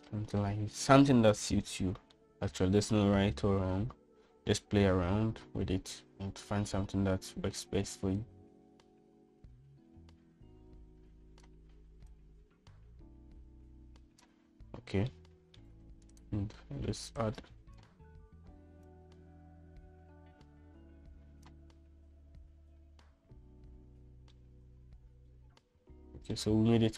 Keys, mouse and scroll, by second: 3.3 shift+middle click, 9.4-12.6 drag, 13.2-15.4 drag, 16.2 shift+middle click, 17.3 click, 25.5-26.9 middle drag.